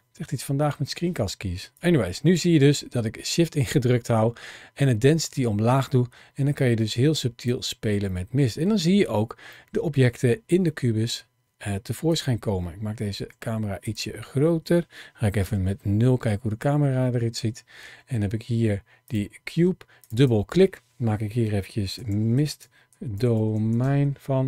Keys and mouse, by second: 1.6-7.3 drag, 8.0-8.6 middle drag, 9.4-9.9 middle drag, 10.6-10.9 middle drag, 11.9 click, 13.0 s, 15.2 KP_0, 18.8 click, 19.8 click, 20.1-24.4 drag.